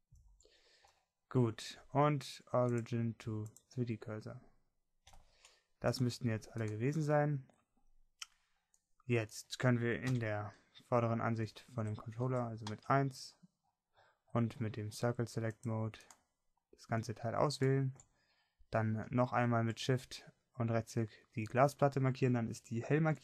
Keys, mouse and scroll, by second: 0.1 Tab, 11.4 KP_1, 13.6 a, 14.1 c.